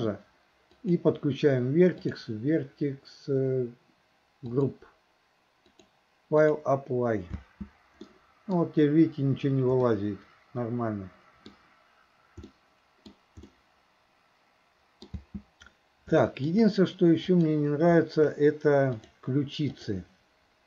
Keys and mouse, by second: 0.8 click, 2.0 click, 4.6 click, 5.7-6.6 drag, 7.4 space, 8.1-8.7 middle drag, 9.9-11.5 middle drag, 12.5-13.2 middle drag, 13.6-15.2 middle drag, 15.2 space, 16.2 shift+middle drag, 17.2 click, 19.0-20.0 drag.